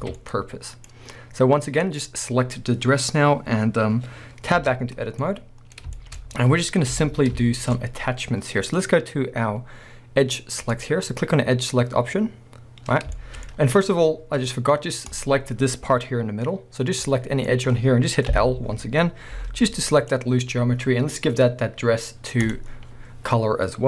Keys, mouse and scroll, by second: 0.0 alt+a, 0.2-1.8 middle drag, 0.9 scroll up 1, 1.8 click, 2.3 scroll down 1, 4.6 Tab, 4.9 scroll up 1, 5.2-6.9 middle drag, 6.9 KP_1, 7.6 shift+middle click, 7.9 scroll up 1, 10.7 click, 13.2 shift+middle click, 15.1 click, 15.5-17.1 scroll down 1, 17.1 middle click, 18.4 l, 19.4 g, 20.1 right click, 20.3-22.4 scroll down 1, 22.4-23.8 drag.